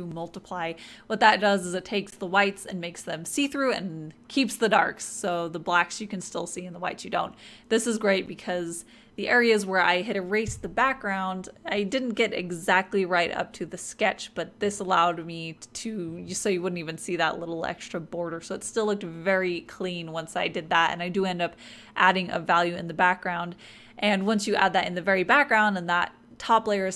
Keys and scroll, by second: 7.3-10.2 typing.